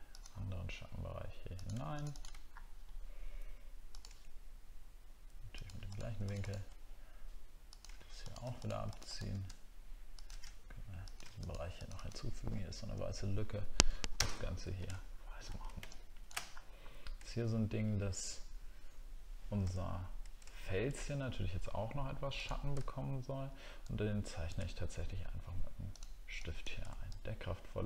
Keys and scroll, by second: 2.5 alt+scroll up 1, 14.1 ctrl+BackSpace, 14.6 ctrl+d, 15.1 alt+scroll down 1, 16.5 alt+scroll down 1, 19.7 alt+scroll down 1, 20.5 alt+scroll down 1, 22.9 alt+scroll up 1.